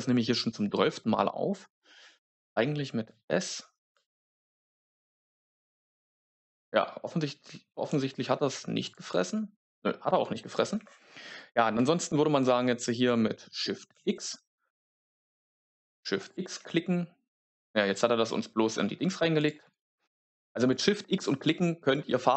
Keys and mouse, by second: 0.0 ctrl+space, 3.0-3.8 s, 7.8-9.0 s, 8.7 click, 10.6 ctrl+z, 13.8 shift+x, 14.0 shift+x, 15.8-16.3 shift+x, 16.1 shift+click.